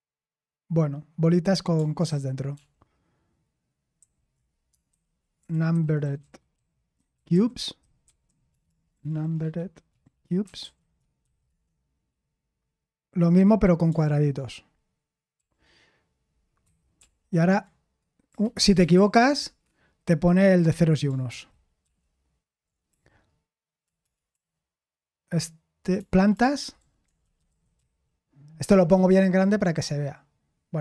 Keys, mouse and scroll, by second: 4.0 ctrl+w, 4.6-11.7 typing, 15.3 typing, 16.6 ctrl+p, 18.3 ctrl+c, 19.3 ctrl+p, 21.0-25.6 typing, 26.7 BackSpace, 27.3-28.6 BackSpace, 30.1 typing.